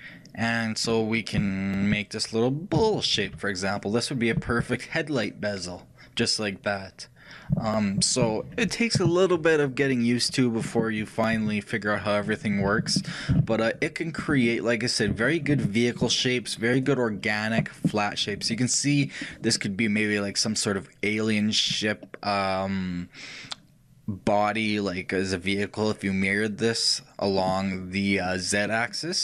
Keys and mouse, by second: 1.7-5.7 middle drag, 13.4 ctrl+z, 14.5-16.9 drag, 16.9-21.5 shift+middle drag, 28.7-29.2 middle drag.